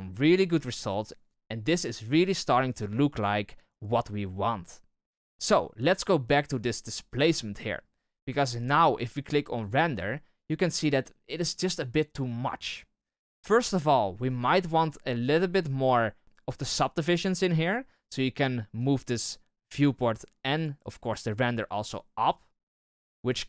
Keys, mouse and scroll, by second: 9.6 click, 14.3-23.4 drag.